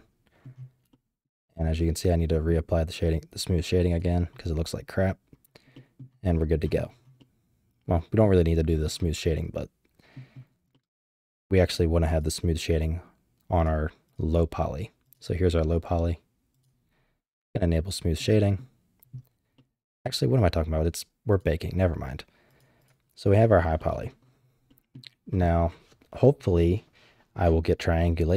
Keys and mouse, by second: 0.9-1.2 shift+middle drag, 1.8 middle click, 3.9 click, 5.7 drag, 7.2-8.2 middle drag, 9.3 middle click, 10.7 middle drag, 12.1 click, 13.6 click, 15.0 click, 16.5 click, 17.5-18.2 drag, 18.4 drag, 19.5-20.3 drag, 21.3 click, 22.5 click, 22.8 click, 23.8 middle drag, 24.7 middle click.